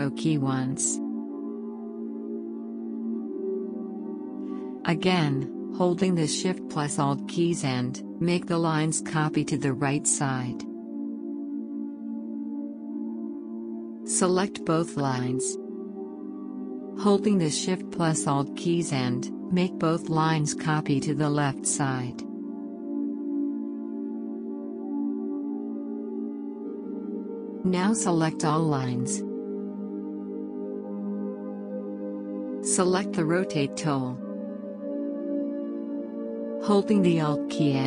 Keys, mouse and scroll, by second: 0.8 shift+Right, 3.0-34.0 drag, 34.2 click.